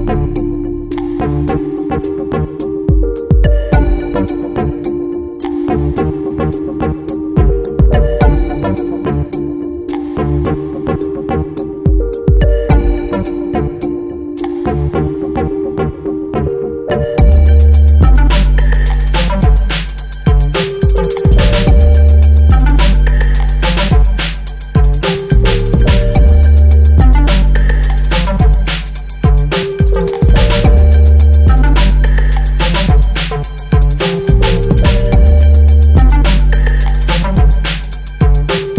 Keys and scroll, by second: 2.8 Down, 10.4 Up, 23.5 j, 25.6 BackSpace, 26.7 j, 28.1 e, 29.0 n, 29.6 i, 32.0 f, 32.5 e.